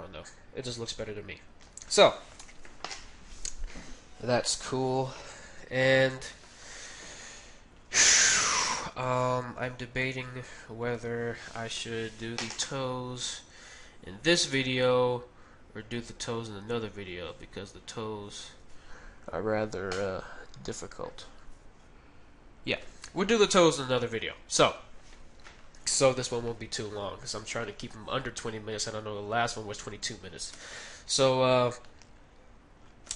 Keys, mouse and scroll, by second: 0.6 middle click, 2.3 KP_1, 2.4 KP_4, 4.5 KP_1, 5.1-11.8 middle drag, 5.8 KP_1, 9.6 Tab, 11.0 KP_1, 24.2-28.7 middle drag, 30.5 shift+s, 31.9-33.1 middle drag.